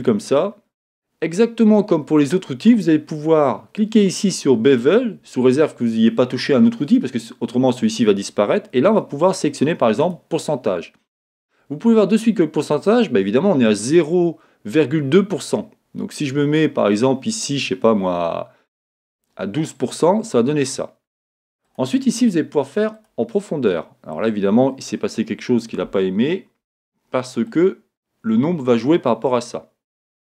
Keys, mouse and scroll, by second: 4.7 click, 5.1 middle click, 8.9-13.6 drag, 14.1-30.3 drag, 24.2-24.9 scroll down 2, 24.9 scroll down 1.